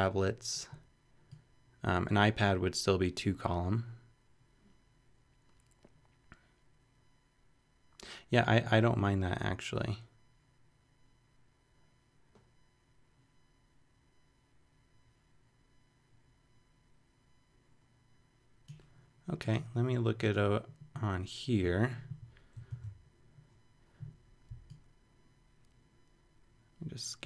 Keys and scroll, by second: 22.7 alt+super+c.